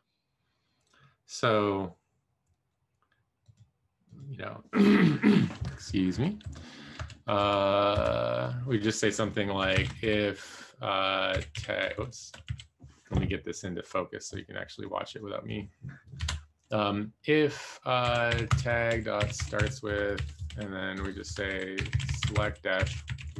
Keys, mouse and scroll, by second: 3.4 click, 4.1 click, 6.1 Return, 6.4 Up, 6.9 Tab, 7.3 Tab, 7.9 Escape, 10.6 shift+9, 11.8 BackSpace, 12.4 f, 17.8-23.3 typing, 21.2 Escape.